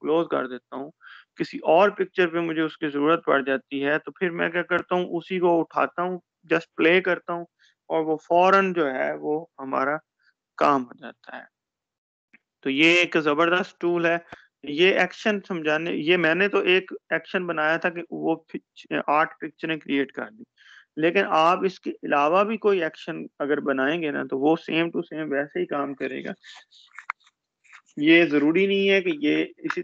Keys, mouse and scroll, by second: 1.3-2.1 shift+scroll down 1, 7.8-8.2 shift+scroll down 1, 17.5 shift+click, 24.3 shift+click.